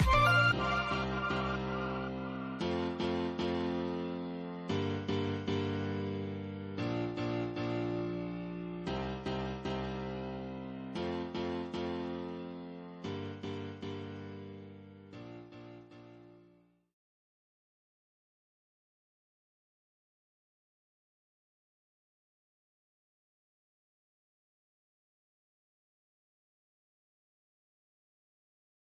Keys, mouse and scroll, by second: 1.7 scroll up 1, 5.1 click, 6.2 middle click, 7.3 scroll down 1, 7.8-10.1 middle drag, 10.1 scroll up 1, 13.3 click, 15.8 middle click, 16.8 scroll down 1, 19.3 click, 20.7-23.6 middle drag, 24.0 scroll up 1, 28.5 scroll down 1.